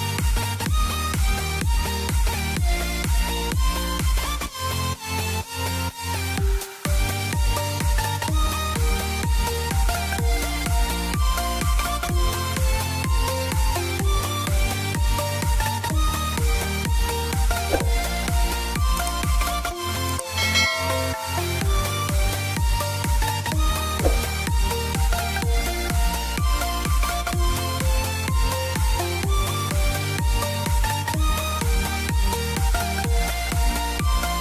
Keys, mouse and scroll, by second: 1.4 click, 2.3 e, 2.9 click, 3.5 middle click, 5.0 click, 8.6 ctrl+right click, 9.2 click, 11.4 ctrl+right click, 12.0 click, 12.9-13.4 typing, 14.2 click, 17.3 scroll up 1, 17.8 click, 18.4 scroll down 1, 18.6 middle click, 19.2 click, 19.6 right click, 20.3 click, 20.7 ctrl+z, 21.3 click, 21.9 right click, 22.5 click, 23.3-24.4 typing, 24.4 click, 25.4 scroll up 1, 26.8 click, 28.5 scroll down 1, 29.5 z, 30.7 KP_Add, 32.4 click, 33.4 c, 34.2 click.